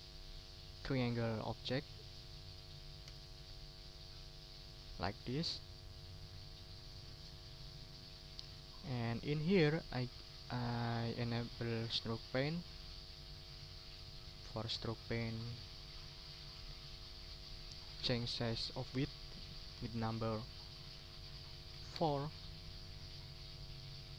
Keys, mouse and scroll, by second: 3.0 Delete, 3.6 click, 4.3-4.6 ctrl+scroll down 2, 4.8 ctrl+click, 5.4 ctrl+scroll up 2, 5.9 ctrl+middle click, 6.3 ctrl+scroll down 2, 6.8-7.9 ctrl+drag, 8.1 ctrl+scroll up 2, 9.0 ctrl+shift+g, 10.4 click, 11.8 click, 12.6 click, 13.9 click, 15.0 click, 21.0 4, 21.9 Return.